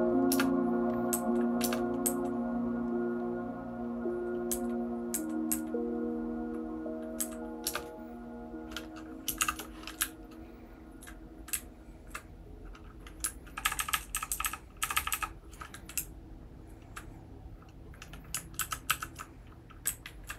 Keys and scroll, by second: 0.3 Return, 1.1 Down, 1.3 Down, 1.6 Return, 2.0 Down, 5.5 Down, 7.2 Down, 7.7 Return, 9.4 shift+g, 10.0 Up, 10.5-11.0 Up, 11.5 Down, 12.0 Down, 12.1 Down, 13.6-14.8 typing, 15.9 Down, 16.4-16.8 Down, 18.5 ctrl+w, 18.9 Down, 18.9 ctrl+w, 19.8 Down.